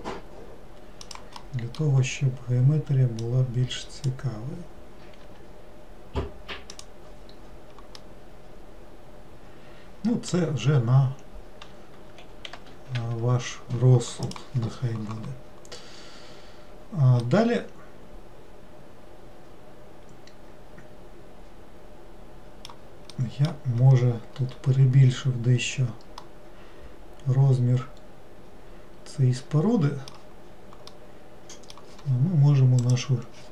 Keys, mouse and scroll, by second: 1.5-3.3 middle drag, 3.3 click, 8.1-11.1 middle drag, 16.4-16.8 scroll down 2, 17.3-20.4 middle drag, 23.2-23.9 middle drag, 23.9-25.1 scroll up 5, 25.1-26.3 scroll down 2, 26.3-29.5 middle drag, 31.0-32.9 middle drag, 32.9 click.